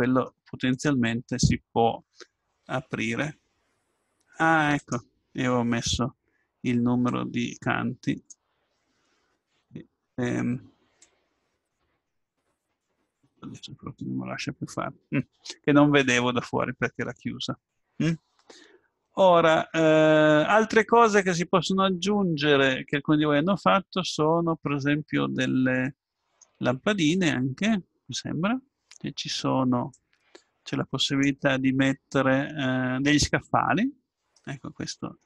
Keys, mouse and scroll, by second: 0.7-3.0 right drag, 2.5 r, 7.1-8.9 drag, 11.0-14.4 drag, 19.2 middle click, 19.5 middle click, 19.7 middle click, 19.8 middle click, 20.4 middle click, 29.9-31.8 drag, 34.3 middle click.